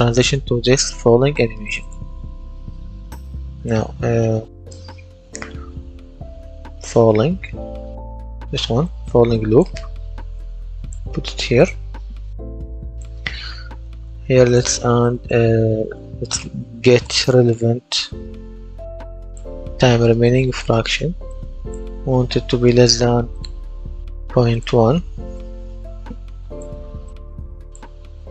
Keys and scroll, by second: 6.3-7.9 typing, 16.3-18.4 typing, 22.3 shift+,, 25.1 KP_0, 25.3 KP_Decimal, 25.5 KP_1, 25.9 Return.